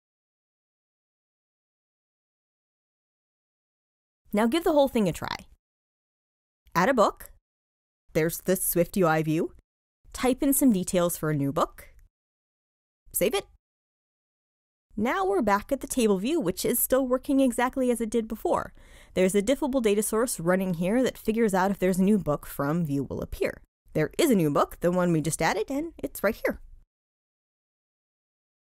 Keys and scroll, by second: 4.3 super+r.